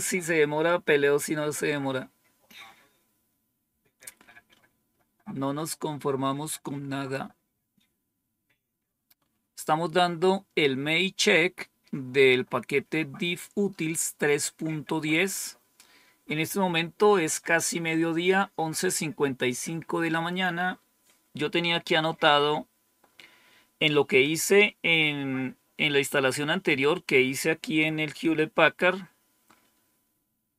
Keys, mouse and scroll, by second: 6.3-7.1 scroll down 2.